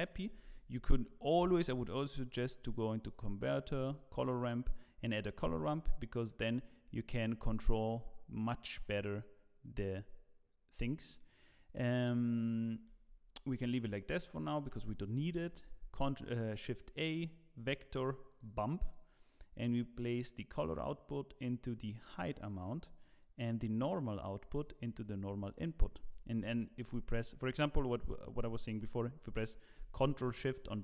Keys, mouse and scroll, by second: 0.3 click, 0.3 shift+a, 5.4-6.6 scroll up 4, 6.6 click, 11.1 middle click, 12.6 middle click, 12.9-13.7 scroll down 7, 13.6 click, 15.3 click, 15.3 shift+a, 30.7 ctrl+shift+click.